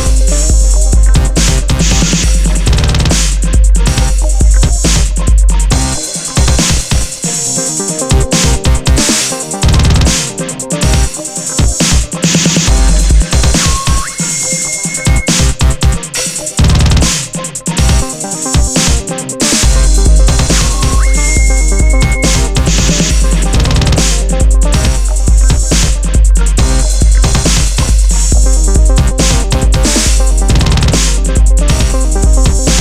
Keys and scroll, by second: 1.2 super+-, 3.5 super+i, 13.1 super+i, 18.9 alt+super+z, 24.2 super+z, 25.6 super+z, 26.3 super+z.